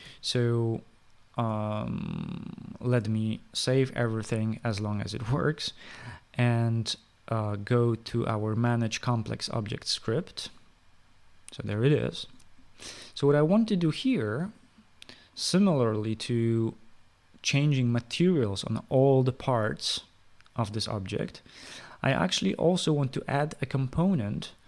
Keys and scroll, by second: 3.9 ctrl+s.